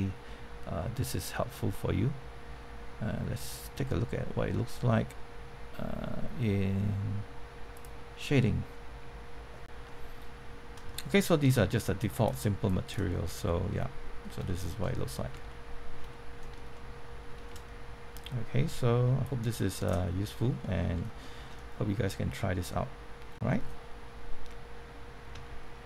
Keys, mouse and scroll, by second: 7.7 click, 9.8 middle click, 12.0 click, 13.1-13.6 scroll up 1, 13.9 middle click, 14.4-15.9 shift+middle drag, 16.1 middle click, 19.2 click, 20.0-20.4 scroll up 1, 20.6 shift+middle click, 20.9 scroll down 1, 21.2 shift+middle click.